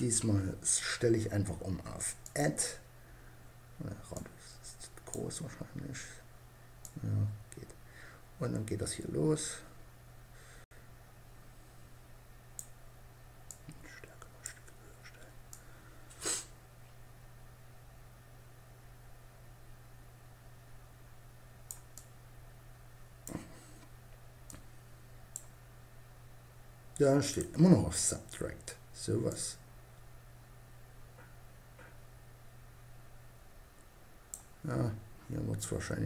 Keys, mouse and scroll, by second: 1.6-5.2 drag, 6.2-8.1 drag, 12.7-14.5 drag, 14.9-16.6 drag, 21.3-23.0 drag, 23.8-25.5 drag, 26.7-28.5 drag, 28.7-30.4 drag, 34.9-36.0 drag.